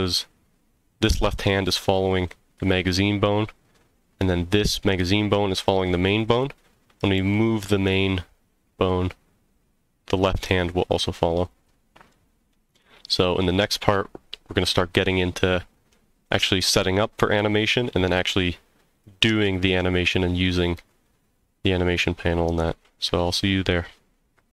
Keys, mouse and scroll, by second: 6.1 click, 7.2 g, 11.5 click, 11.5 right click, 12.1-13.1 middle drag.